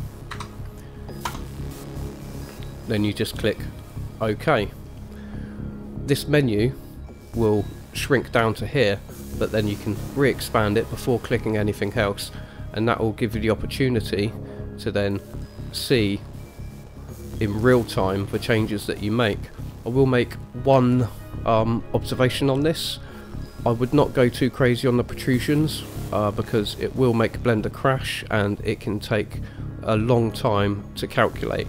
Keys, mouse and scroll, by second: 6.4 click, 9.7 click, 15.2 click, 17.1-18.1 middle drag, 19.2-20.2 middle drag.